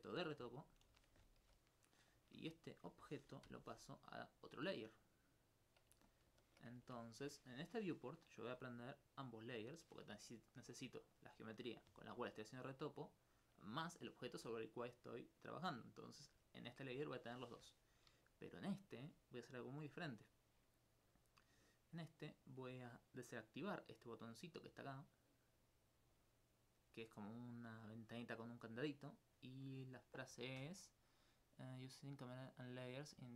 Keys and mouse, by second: 0.9 Tab, 1.4 g, 2.1-3.3 drag, 3.3 Tab, 3.5 m, 5.2 click, 6.1 alt+click, 6.3 alt+s, 9.5 shift+click, 10.2 alt+click, 26.2 click.